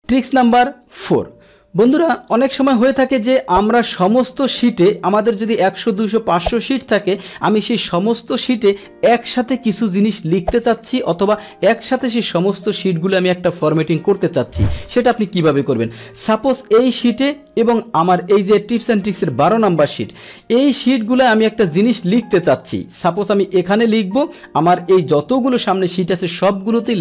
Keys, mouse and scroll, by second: 2.2 click, 15.4 click, 19.5 shift+click, 20.3 click, 21.0 click, 21.8 click, 23.3 click, 23.8 click, 24.2 click.